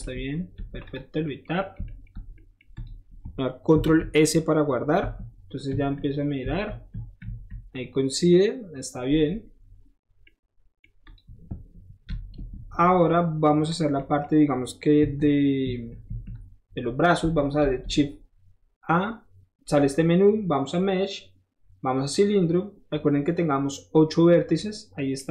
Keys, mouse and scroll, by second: 0.0 Tab, 0.2 scroll down 1, 0.5 Tab, 0.8 click, 1.4 middle drag, 2.0 shift+middle drag, 2.8 shift+click, 3.0 shift+middle click, 3.1 shift+middle click, 3.7 ctrl+s, 5.0-7.2 typing, 9.5 middle click, 9.9 scroll up 1, 10.1-10.8 middle drag, 11.0 click, 12.0 ctrl+s, 13.7 click, 15.1 KP_1, 15.6 KP_3, 16.0 KP_1, 17.0 middle click, 17.6 shift+a, 22.1 click.